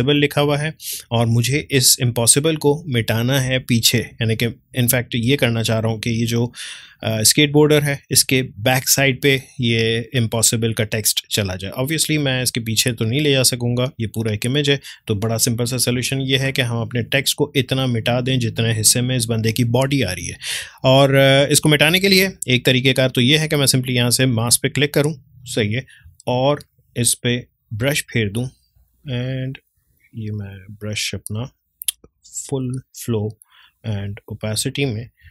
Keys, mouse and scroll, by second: 0.0 ctrl+space, 16.0 space, 16.2-24.4 ctrl+drag, 24.4 click, 27.7-35.3 drag.